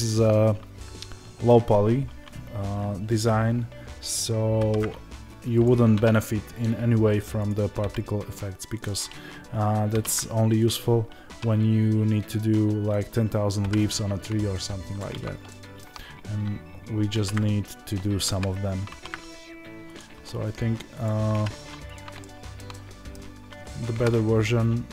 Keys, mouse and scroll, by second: 4.5 alt+d, 5.5 click, 7.4 click, 10.6 click, 12.9 click, 13.5 g, 14.9 click, 15.4-19.9 shift+middle drag, 17.0 alt+r, 19.9 click, 21.9 click, 22.1-24.9 shift+middle drag, 23.9 KP_7.